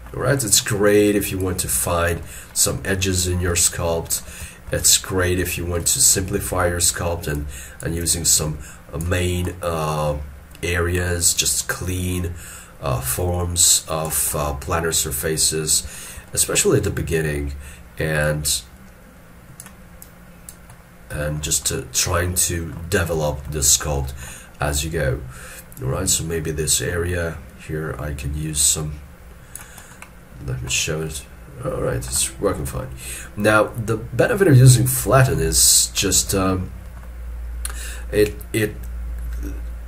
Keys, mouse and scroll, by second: 4.6 shift+middle click, 9.5 middle click, 9.9 scroll down 1, 10.9 scroll up 1, 14.4 scroll down 1, 16.0 shift+middle click, 16.3 shift+middle click, 21.3 shift+middle click, 21.7 shift+middle click, 23.3 shift+middle click, 24.9-25.7 scroll up 1, 31.0 scroll down 1, 33.9-35.2 scroll up 1, 35.2 scroll, 35.4 ctrl+middle click, 36.5 shift+middle click.